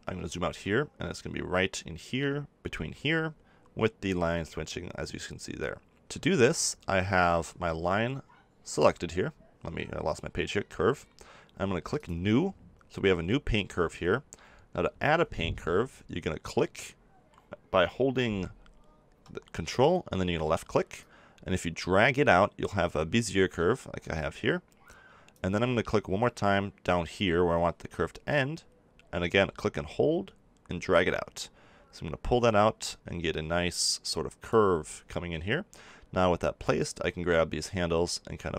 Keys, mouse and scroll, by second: 0.3 click, 0.5-8.7 middle drag, 8.7-13.7 drag, 21.0-22.7 drag, 29.2-31.1 drag, 36.6-38.4 drag.